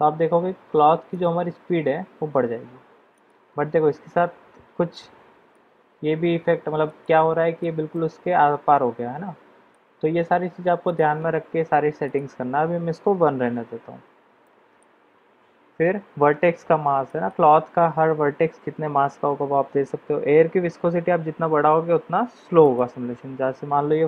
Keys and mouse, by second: 1.1 click, 3.4 click, 5.4-6.9 middle drag, 7.0 middle click, 7.9-9.7 middle drag, 10.8 click, 12.0-13.8 drag, 14.4 middle click, 17.0-17.4 middle drag, 22.6-24.0 drag.